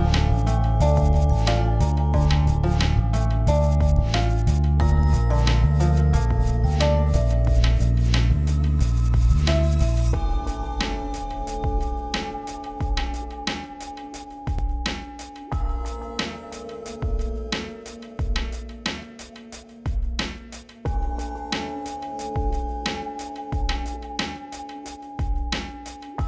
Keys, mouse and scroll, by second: 0.6 click, 4.9-5.3 click, 5.7 ctrl+scroll up 1, 6.6 alt+scroll down 1, 7.7-9.5 alt+drag, 9.8-10.2 click, 10.7 ctrl+0, 11.0 click, 11.9 l, 12.1 ctrl+z, 12.3-13.1 drag, 14.1 v, 14.3-19.5 drag, 20.6-21.6 alt+scroll down 2, 21.6 click, 22.3-22.7 click, 23.3-24.4 typing, 25.5 click, 25.5-26.2 scroll down 2.